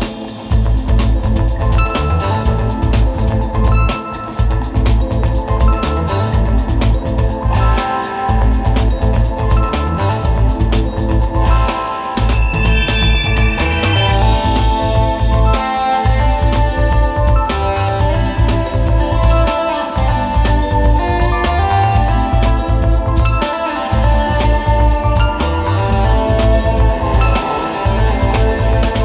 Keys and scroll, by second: 0.0-0.3 typing, 1.5 space, 1.7 space, 2.5 space, 5.8 space, 7.4 super+[, 7.9 super+z, 9.4 space, 9.9 space, 10.8 super+s, 10.9 space, 12.2 super+space, 12.9 space, 13.4 space, 13.7 space, 15.7-17.5 typing, 22.6 space, 24.5 space, 26.4 super+z, 28.4 space, 28.6 space.